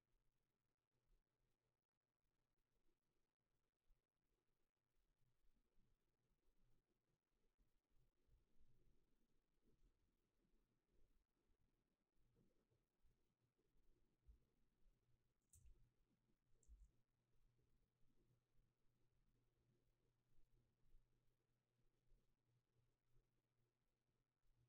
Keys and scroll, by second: 15.5 h, 16.7 a.